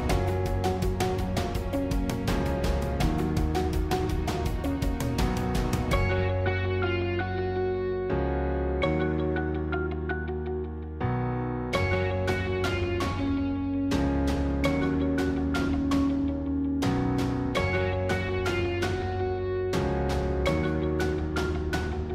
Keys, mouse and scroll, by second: 6.5 click, 7.0-8.7 middle drag, 8.7 ctrl+z, 10.4 g, 12.4 click, 13.6 ctrl+z, 16.0 g, 17.8 click, 18.3-21.8 middle drag, 21.8-22.1 scroll down 1.